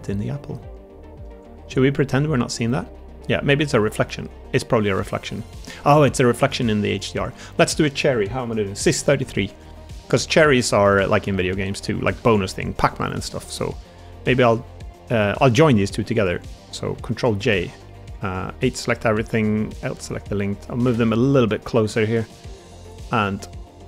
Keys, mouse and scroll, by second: 1.2 Tab, 1.7-2.7 middle drag, 2.9-3.4 middle drag, 4.0-5.2 middle drag, 6.0 middle drag, 6.4 shift+middle drag, 6.8 click, 7.0 Tab, 7.4 middle click, 9.3 Tab, 9.8 middle drag, 10.5 shift+middle click, 10.8 middle click, 11.5 shift+middle click, 12.0 shift+d, 17.1 ctrl+j, 17.9 Tab, 19.2 k, 21.6 l, 22.3 click.